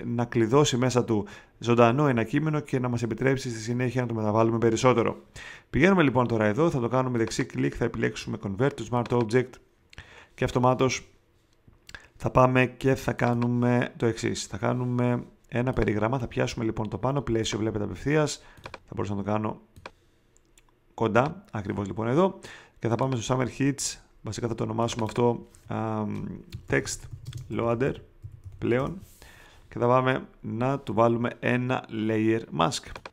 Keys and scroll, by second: 26.4-28.7 typing.